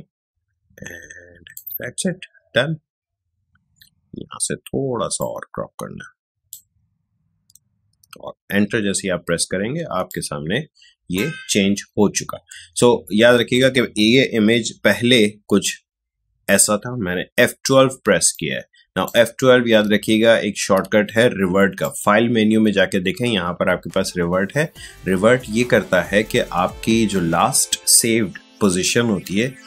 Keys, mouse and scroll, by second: 5.1 click, 5.2-9.1 drag, 9.8 space, 10.0 click, 10.3 space, 15.6 F12, 17.7 space, 18.3 click, 18.4 space, 19.9 ctrl+z, 20.7 ctrl+z, 21.8 click.